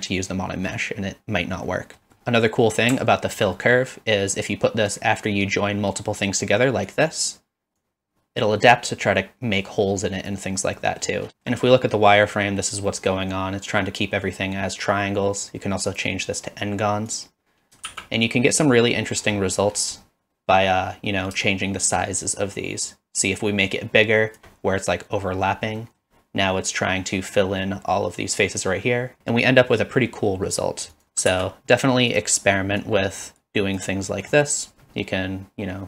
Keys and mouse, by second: 1.7-2.2 middle drag, 3.0 alt+click, 3.7 middle click, 5.1 click, 6.9 click, 10.8 middle click, 11.3 shift+middle drag, 11.8-12.1 middle drag, 12.9 middle drag, 15.9 click, 17.1 click, 17.9 shift+z, 18.9 middle click, 20.0 middle click, 21.5-24.4 shift+drag, 25.8 middle drag, 30.9 click, 31.3 shift+d, 32.9-33.8 drag, 34.1 middle click, 34.9-35.8 shift+drag.